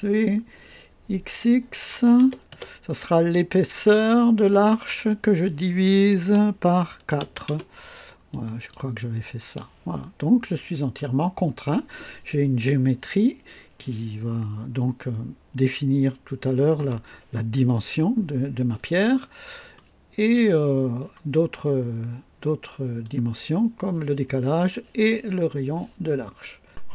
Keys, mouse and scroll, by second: 2.2-2.5 typing, 4.4 click, 6.2-7.4 typing, 7.4 KP_Enter, 8.3 click, 10.0 scroll up 1, 10.6 scroll down 1, 11.4 scroll down 1, 19.1 scroll down 1, 19.7-20.5 right drag, 21.3-22.6 scroll down 2, 22.6-23.2 right drag, 23.2 scroll down 2.